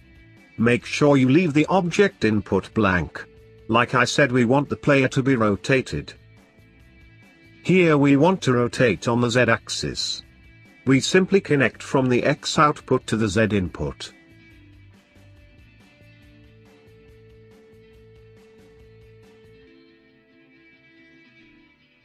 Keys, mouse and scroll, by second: 2.4 click, 4.5 scroll up 1, 4.5-5.6 middle drag, 5.6 click, 7.3 click, 9.3-16.7 drag.